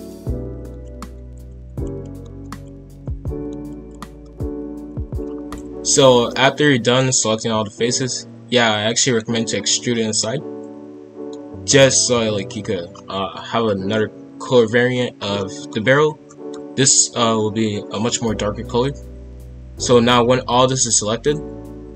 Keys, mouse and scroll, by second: 0.3 alt+shift+click, 0.6 middle click, 0.8 alt+shift+click, 0.9 alt+shift+click, 1.0 middle click, 1.3 alt+shift+click, 1.5 middle click, 1.8 alt+shift+click, 2.1 middle click, 2.4 alt+shift+click, 2.7 middle click, 3.0 alt+shift+click, 3.3 middle click, 3.6 alt+shift+click, 3.9 alt+shift+click, 3.9-4.3 scroll down 2, 4.1 middle click, 4.3 middle click, 4.5 ctrl+b, 6.0 scroll down 1, 6.3-12.4 middle drag, 12.4-12.9 scroll down 2, 12.9-14.1 scroll up 3, 14.1-15.1 scroll up 1, 15.1 scroll up 1, 15.4 middle click, 15.7-16.2 scroll down 1, 16.2-19.4 middle drag.